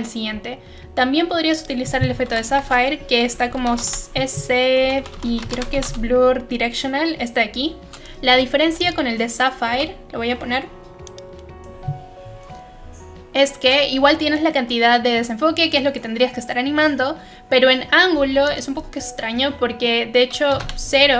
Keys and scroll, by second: 2.3-6.2 typing, 9.7 Delete, 20.5 0, 20.5 Return.